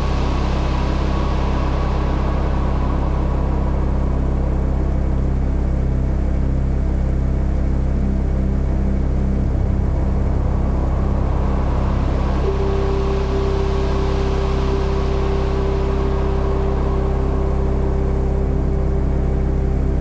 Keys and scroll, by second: 10.9 BackSpace, 12.6 ctrl+alt+t.